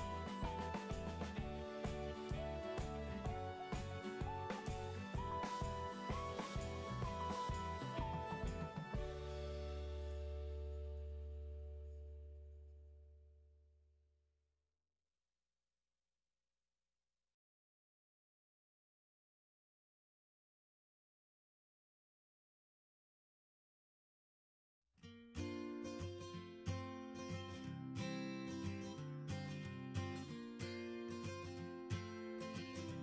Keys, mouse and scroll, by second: 10.1 click, 10.8 middle click, 11.1 scroll up 1, 11.1-12.0 scroll, 12.8 click, 13.4 click, 14.3 click, 15.1 click, 15.8 click, 16.6 click, 17.5 click, 19.7-20.8 scroll, 19.9-20.5 middle drag, 20.5 middle click, 20.9-21.6 scroll down 7, 21.6 scroll up 1, 25.2-25.9 scroll, 25.9-27.4 scroll, 27.6 right click, 28.6 click, 29.1 click, 29.6 right click, 31.1 click, 32.0 middle click.